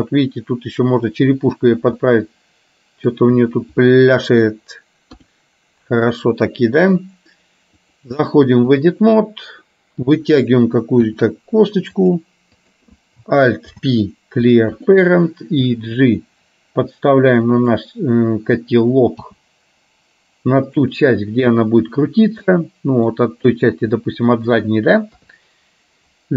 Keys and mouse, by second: 2.1-3.1 middle drag, 4.0 middle click, 5.2 KP_3, 8.0-9.0 drag, 12.7 click, 13.9 alt+p, 15.7 g, 19.2 g, 22.6 middle click, 24.1 middle click, 25.2 KP_3.